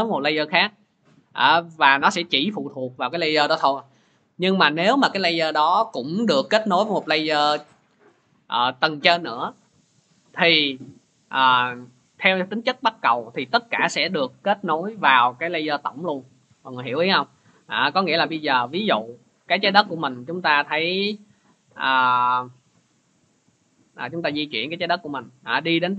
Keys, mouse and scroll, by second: 4.1-9.1 drag, 18.3 click, 22.6 click, 23.8 click.